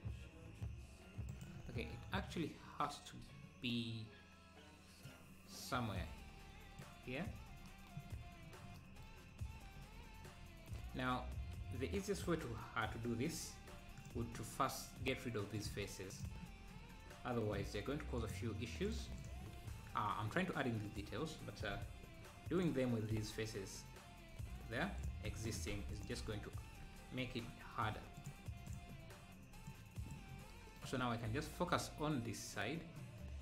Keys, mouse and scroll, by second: 1.9-2.9 scroll down 2, 2.9 `, 5.1-7.1 drag, 8.1 scroll up 2, 10.5 scroll down 2, 11.3 scroll up 1, 14.0-20.8 drag, 21.8 x, 25.0 click, 25.7 x, 28.2-30.3 drag, 31.0 scroll up 1.